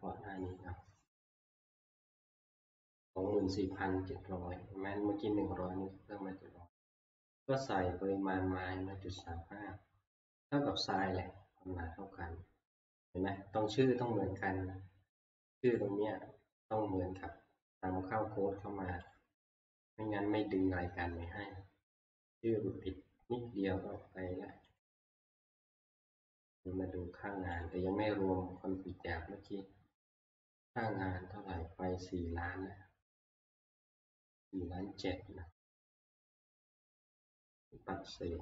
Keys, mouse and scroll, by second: 0.5 Up, 0.5 click, 2.3-5.7 drag, 5.4 scroll up 1, 10.1-14.3 middle drag, 14.3-15.2 scroll down 1, 15.8 click, 19.2 click, 24.8 click, 26.0 click, 27.7 click, 30.8 click.